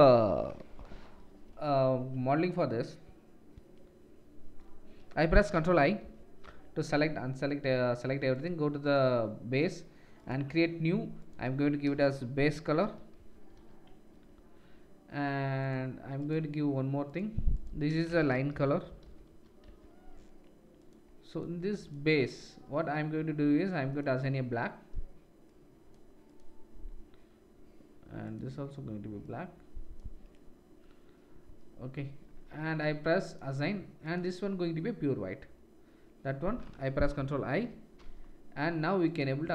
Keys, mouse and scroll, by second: 6.0 ctrl+i, 8.4-8.8 drag, 8.9-10.1 drag, 15.7 click, 21.9 click, 22.5-24.4 drag, 28.2 click, 33.2-34.1 drag, 39.1-39.5 drag.